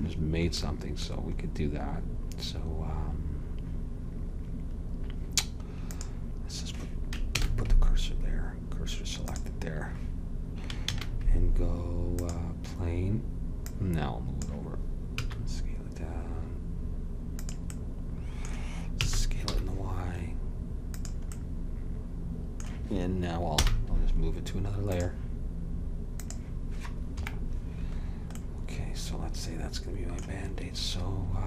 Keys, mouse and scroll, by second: 0.7-4.5 middle drag, 6.1-7.4 drag, 7.4 shift+s, 11.0 shift+a, 13.8-15.2 drag, 15.2 s, 19.1 s, 23.7 m, 26.3 click, 27.2 KP_Decimal, 28.1-30.3 middle drag.